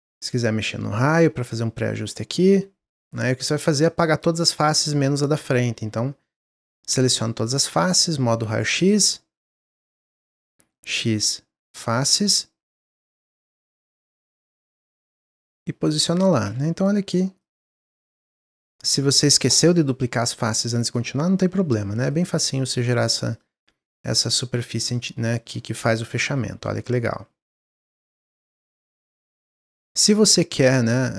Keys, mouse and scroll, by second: 0.6-2.9 drag, 2.9 Tab, 3.4 click, 4.2-6.4 middle drag, 6.4-7.0 scroll down 3, 7.0-8.4 middle drag, 8.4 click, 9.7-10.7 middle drag, 10.7 x, 12.7 click, 12.9 middle click, 13.2 scroll up 1, 13.5 click, 13.8-14.2 scroll up 1, 14.5-15.6 drag, 15.6 Tab, 16.0 click, 17.4 click, 18.5 click, 20.0-22.0 middle drag, 22.0 click, 22.5-23.3 middle drag, 23.3 click, 23.6-24.1 middle drag, 24.1-24.5 scroll down 2, 24.5-26.3 middle drag, 26.3 scroll down 1, 26.6-29.6 middle drag, 29.7 Tab, 30.5 middle click, 30.8 scroll up 1.